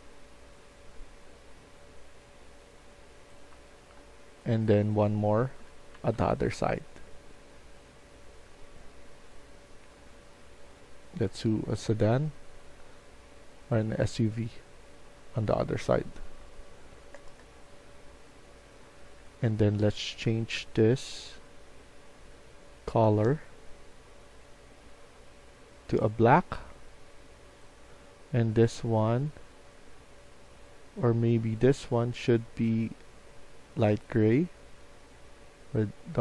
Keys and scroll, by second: 3.2-6.6 typing, 11.6 s, 16.6-17.6 typing, 19.1 a.